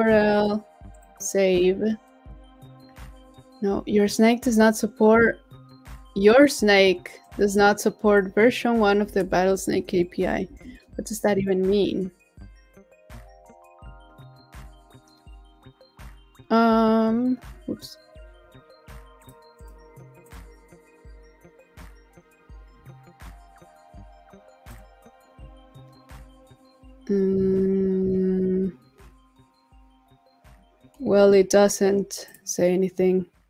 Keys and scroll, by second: 9.2 super+c, 10.2 super+t, 10.5 super+v.